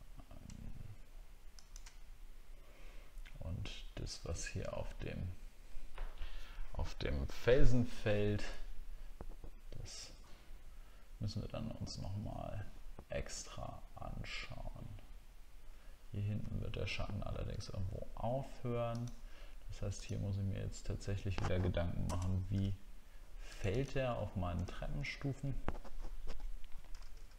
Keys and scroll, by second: 24.6 alt+scroll up 1.